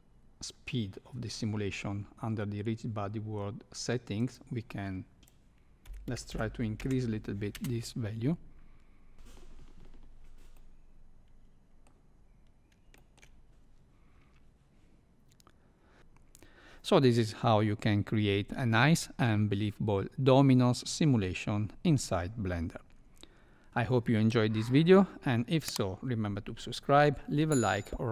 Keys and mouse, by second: 4.2-7.2 drag, 5.2 shift+Left, 5.2 space, 7.5 space, 10.5-11.9 middle drag, 12.9 shift+middle click.